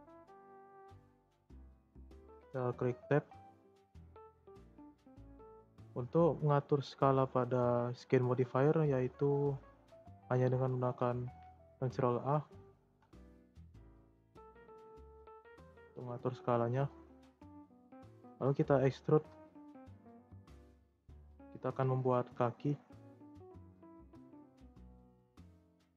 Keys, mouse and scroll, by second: 1.9 Tab, 2.6-12.9 shift+middle drag, 12.9 ctrl+a, 17.8-19.0 shift+middle drag, 19.0 e, 21.9 e, 24.4 click, 25.1 shift+scroll up 1, 25.1 shift+middle click.